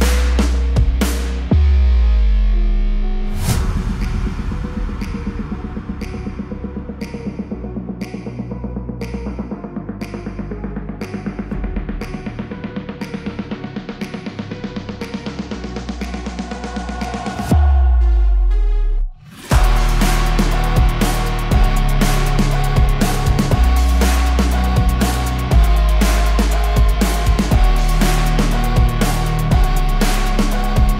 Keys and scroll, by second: 0.0 KP_2, 0.2 KP_0, 0.4 Return, 13.5 Escape, 16.9 Delete, 18.0 Escape, 26.9 Escape.